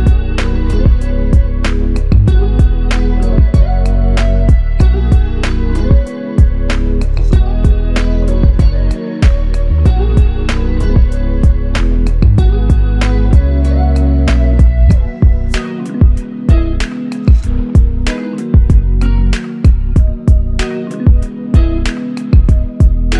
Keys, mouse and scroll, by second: 0.6 shift+click, 2.3 shift+click, 3.4 double click, 4.9 shift+click, 6.5 shift+click, 7.0 alt+click, 9.2 f, 11.3 shift+click, 13.8 alt+shift+click, 15.5 ctrl+click, 18.2 ctrl+shift+click, 21.2 alt+shift+click, 22.5 alt+shift+click.